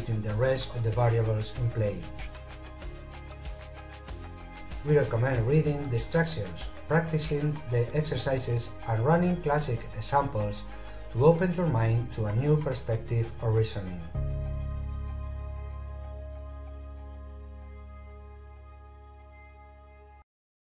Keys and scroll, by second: 3.1 6.